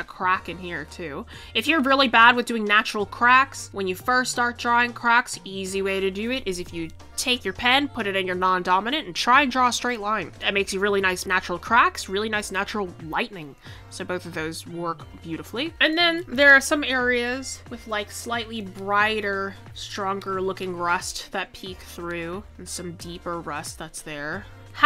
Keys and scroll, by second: 6.3 ctrl+z.